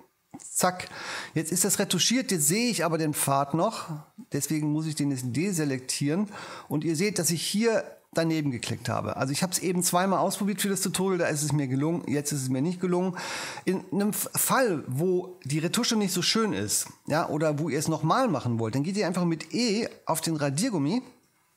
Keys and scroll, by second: 20.6 e.